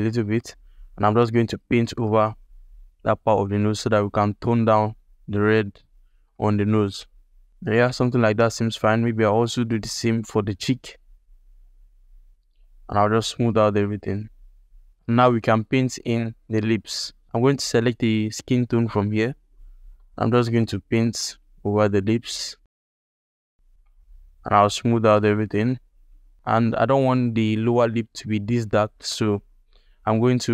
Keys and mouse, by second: 0.3-1.5 drag, 1.7 middle click, 2.2-3.5 drag, 3.7 alt+middle click, 4.1-6.0 drag, 6.2 alt+click, 6.9 click, 7.8 ctrl+alt+click, 8.1 alt+click, 8.5 ctrl+click, 8.9-12.5 drag, 12.6-14.4 shift+drag, 14.9 middle click, 15.1 ctrl+alt+middle click, 15.6 middle click, 16.1 alt+shift+middle click, 16.4 ctrl+alt+middle click, 19.4 middle click, 19.9 ctrl+alt+middle click, 20.0 click, 20.2 f, 20.5-23.7 drag, 23.8-25.4 shift+drag, 25.7 shift+click, 26.4 ctrl+alt+click, 29.0 click.